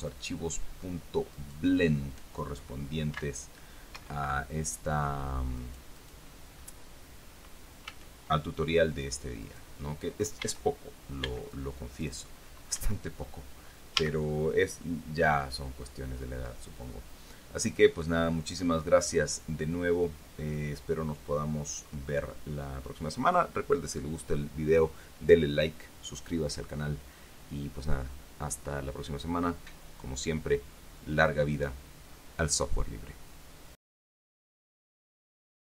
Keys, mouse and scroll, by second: 1.7 right click, 3.5 v, 4.3 Escape, 5.9 right click, 6.9 scroll up 1, 8.2 a, 9.8 right click, 10.7 a, 11.6 b, 11.8 click, 13.1 Escape, 14.3 a, 14.7 scroll down 1, 15.2-18.4 drag, 18.8-19.1 scroll down 1, 19.5-19.8 scroll up 1, 34.5 click, 35.7 click.